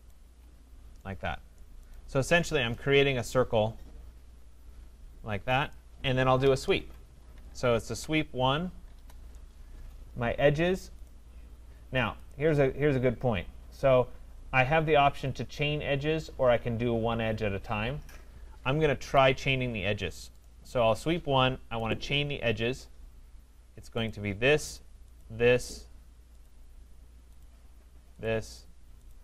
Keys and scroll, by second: 6.4 Escape, 8.9 Return, 19.0 Escape.